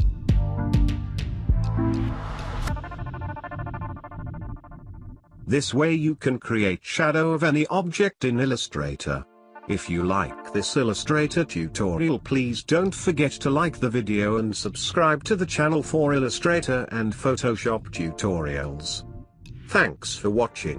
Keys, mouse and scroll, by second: 0.9-1.3 scroll down 1, 1.3 scroll up 1, 3.8 scroll down 1, 5.6 click, 7.9 click, 9.0 ctrl+space, 10.2 ctrl+space, 10.3-16.0 ctrl+alt+drag, 16.4 ctrl+alt+click, 17.9-19.3 alt+drag, 20.0 ctrl+alt+click.